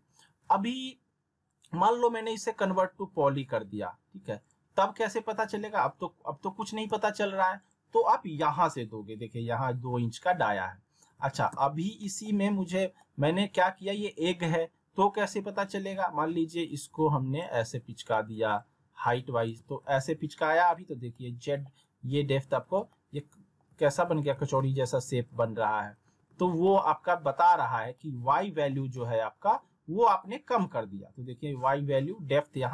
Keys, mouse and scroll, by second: 1.5 right click, 4.4 click, 6.2 alt+w, 6.9 z, 7.6 click, 11.5 z, 12.0 middle click, 12.5 r, 13.0 alt+middle click, 15.6-17.5 drag, 18.5-19.5 drag, 19.9 ctrl+z, 21.1-21.7 alt+middle drag, 22.5 w, 22.9-23.5 alt+middle click, 23.7 alt+w, 24.3 alt+w, 25.3 alt+w, 26.0 alt+w, 26.6-27.3 alt+middle drag.